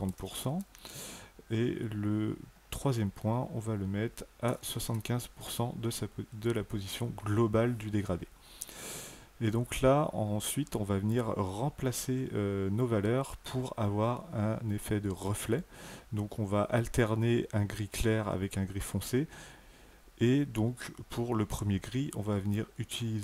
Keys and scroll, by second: 0.1 KP_0, 0.3 Tab, 4.5 KP_7, 4.8 KP_5, 5.2 Tab.